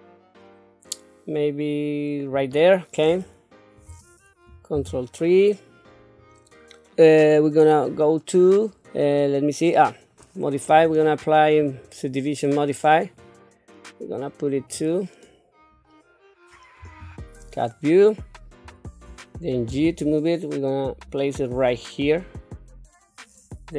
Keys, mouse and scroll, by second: 4.7 ctrl+KP_3, 10.7 click, 11.6-13.2 drag, 14.6 click, 16.8 KP_7, 19.7 g.